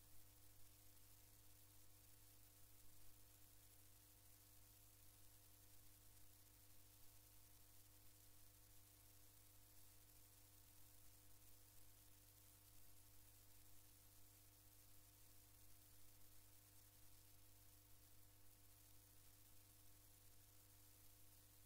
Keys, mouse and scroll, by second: 1.0-1.9 drag, 2.2-5.8 drag, 9.6 click, 13.6 click, 17.2 click, 21.0-21.6 drag.